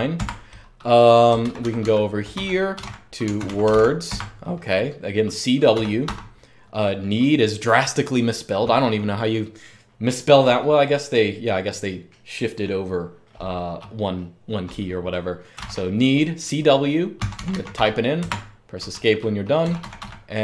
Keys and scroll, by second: 0.0-6.3 typing, 15.3 typing, 16.7-18.0 typing, 18.0 Escape, 19.4-20.4 typing.